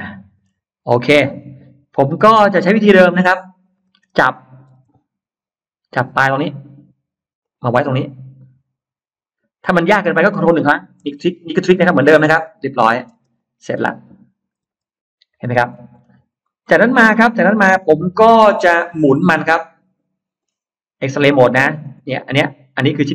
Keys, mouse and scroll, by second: 0.4 scroll down 2, 0.8 middle click, 1.8 middle click, 7.2 click, 12.3 click, 12.9 space, 13.2 click, 14.4 Delete, 15.2 click, 15.6-16.4 scroll down 2, 16.3-20.2 middle drag, 21.0 click, 21.6 scroll up 2, 21.9-23.0 middle drag, 22.8-23.1 scroll down 2.